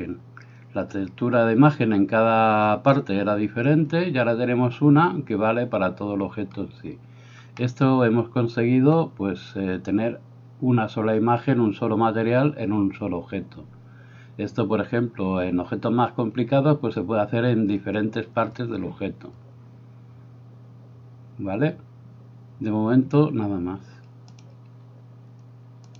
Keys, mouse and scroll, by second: 7.6 middle click.